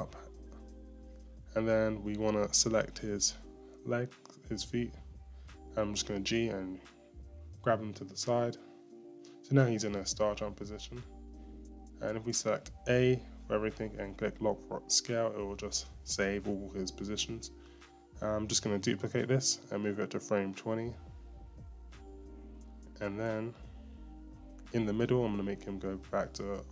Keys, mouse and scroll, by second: 1.4-1.9 scroll up 3, 2.1-2.5 middle drag, 2.4 scroll, 2.5 scroll down 3, 2.8-3.4 scroll up 3, 4.4 click, 5.1-5.6 scroll down 1, 5.6 KP_1, 7.1 g, 10.9 a, 11.3-12.3 scroll down 1, 12.3-12.8 scroll down 2, 14.7 i, 20.0 right click, 23.4-26.4 drag.